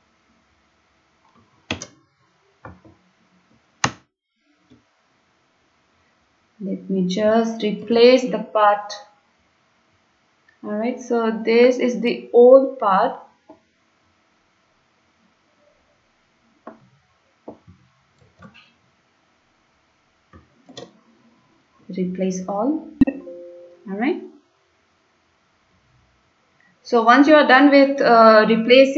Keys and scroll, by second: 1.8 ctrl+a, 4.0 BackSpace, 4.7 Delete, 5.2 Delete, 5.4 Delete, 5.6 Delete, 5.7 Delete, 6.4 Delete, 7.9 ctrl+v, 18.3 ctrl+c, 18.3 ctrl+v, 20.7 ctrl+v, 20.7 ctrl+c, 28.8 ctrl+v.